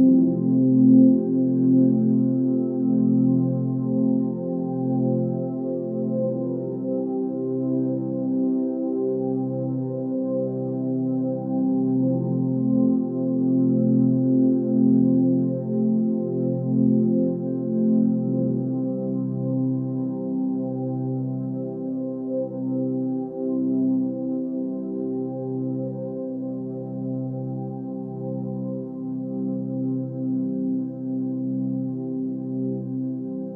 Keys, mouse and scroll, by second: 12.9 space, 13.1-14.0 ctrl+drag, 14.4 space, 14.6-15.2 click, 14.9 space, 15.6 click, 19.7 click, 20.2 scroll up 1, 20.8 click, 28.0 click, 33.2 click.